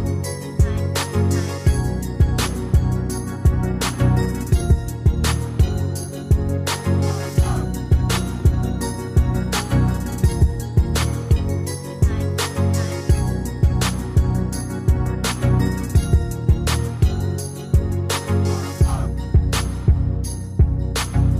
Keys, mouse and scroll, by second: 1.4 Escape, 9.1 Delete.